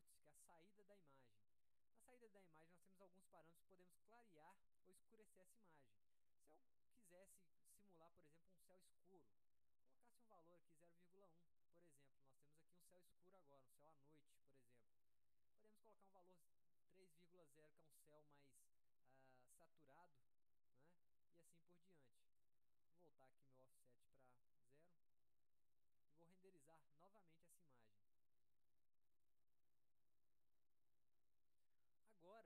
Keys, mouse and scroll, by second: 1.1 click, 6.1 click, 22.0 click, 24.5 right click, 27.3 click, 31.8-32.4 drag.